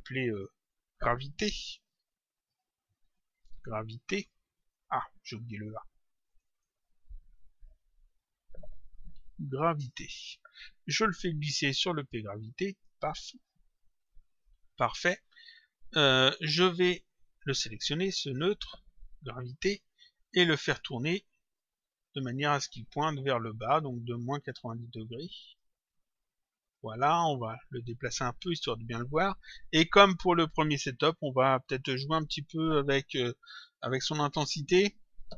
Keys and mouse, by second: 1.6-3.9 typing, 6.2 click, 7.7 Home, 7.9 Right, 9.1 a, 9.8 Return, 11.3 click, 14.0 click, 15.9 click, 17.3 click, 20.4 click, 22.6 click, 26.6 click, 27.8 click, 31.2 click.